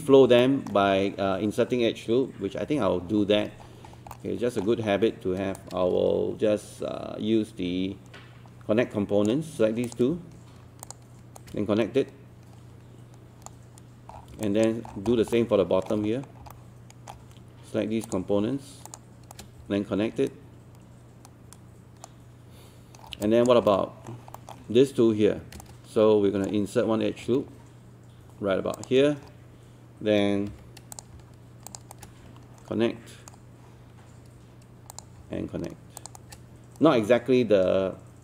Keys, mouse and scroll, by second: 0.4 alt+middle click, 2.6 1, 3.4-4.2 scroll up 2, 4.2 middle click, 4.9-5.3 scroll up 1, 6.6-9.5 shift+right drag, 9.9 click, 10.8 shift+click, 11.4-13.5 shift+right drag, 14.1 scroll down 1, 14.4 alt+click, 15.1 scroll down 1, 15.4 alt+middle click, 16.0 scroll up 1, 18.1 click, 18.9 shift+click, 19.3-22.5 shift+right drag, 23.0 scroll down 1, 23.2 alt+click, 23.7 alt+middle click, 24.4 alt+middle click, 25.6 shift+right click, 28.8 ctrl+click, 30.5 q, 31.0 click, 31.7 shift+click, 31.9-33.5 shift+right drag, 34.9 click, 36.0 shift+click, 36.2-38.2 shift+right drag.